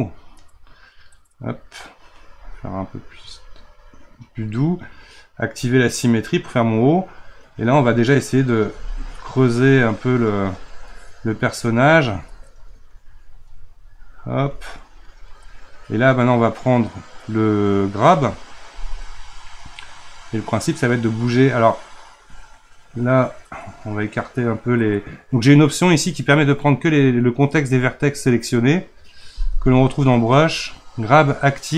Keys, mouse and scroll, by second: 0.5-4.8 right drag, 6.2-8.2 middle drag, 8.2-11.0 drag, 11.0-12.0 middle drag, 12.0-31.7 ctrl+drag.